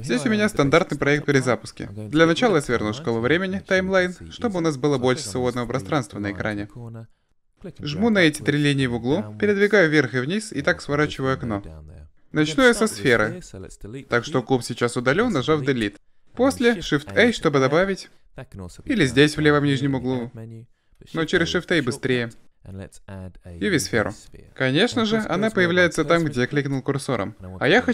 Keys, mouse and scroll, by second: 6.6-7.9 drag, 13.6 Delete, 17.1 shift+a, 21.4 shift+a.